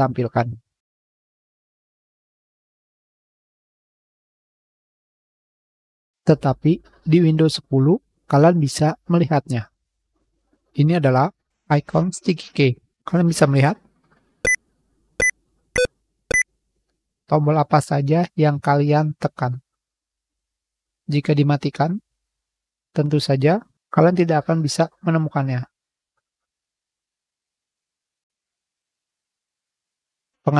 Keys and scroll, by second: 2.0 9.